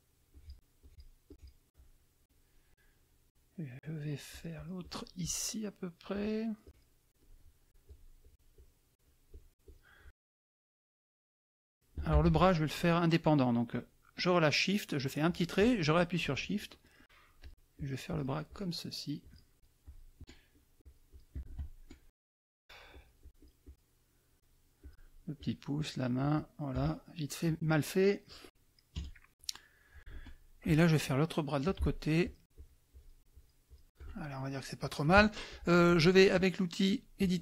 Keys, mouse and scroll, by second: 0.3 shift+click, 0.8 shift+click, 1.3 shift+click, 4.3 shift+click, 6.1 shift+click, 6.6 shift+click, 7.2 shift+click, 7.9 shift+click, 8.2 shift+click, 9.0 shift+click, 10.6 shift+middle click, 12.2 ctrl+shift+z, 14.9 click, 17.4 shift+click, 17.7-18.8 shift+drag, 19.2 shift+click, 20.5 shift+click, 22.4 shift+click, 23.4 shift+click, 24.3 shift+click, 24.8 shift+click, 25.3 shift+click, 25.7 shift+click, 26.2 shift+click, 26.8 shift+click, 27.6 click, 28.9 KP_Subtract, 29.6 click, 31.6 shift+click, 32.2 shift+click, 32.5 shift+click, 33.3 shift+click, 34.1 shift+middle click, 37.2 click.